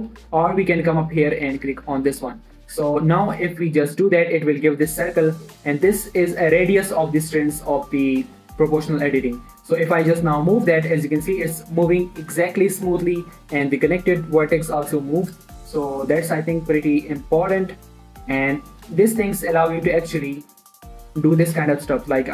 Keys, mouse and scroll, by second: 0.0-0.6 typing, 1.7 click, 3.6 scroll down 1, 3.9 g, 5.2-6.4 scroll down 1, 6.4-7.2 scroll up 1, 7.2-7.6 scroll down 1, 18.7 right click, 19.3 click, 19.5 shift+middle click, 20.0 s, 21.3 click, 21.4 g, 21.9 click, 22.1 shift+middle click.